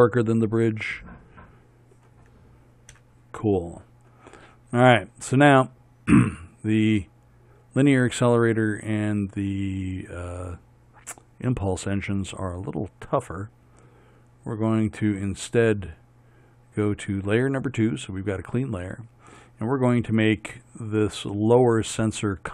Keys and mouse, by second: 3.0 KP_1, 4.1 click.